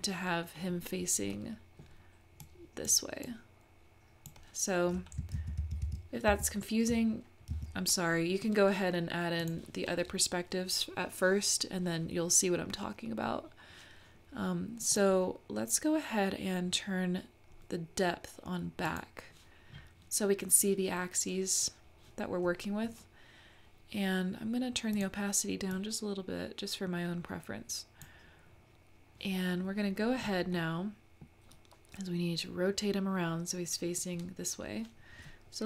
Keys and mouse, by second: 0.0 middle click, 1.3 middle click, 2.4 click, 3.2-4.4 drag, 5.3 super+z, 5.6 super+z, 5.9 super+z, 6.4 super+z, 7.5 `, 9.5 click, 14.9 click, 18.8 click, 25.0 click, 25.8-28.1 drag, 30.6 middle click.